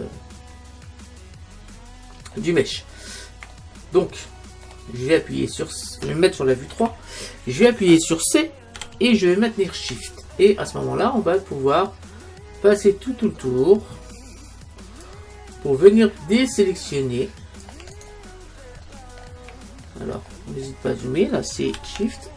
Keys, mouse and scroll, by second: 2.8-6.8 middle drag, 6.8 KP_3, 8.8 c, 18.1 right click, 18.7-22.3 middle drag, 21.8 c.